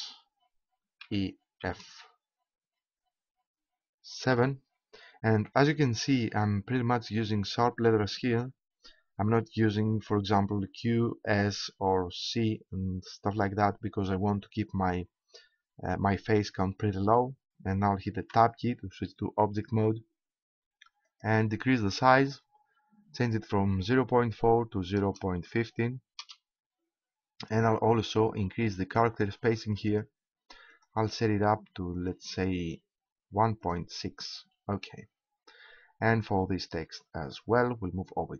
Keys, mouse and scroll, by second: 1.0 shift+e, 2.7 shift+f, 5.0 7, 18.3 Tab, 21.1-23.9 drag, 29.8-33.7 drag.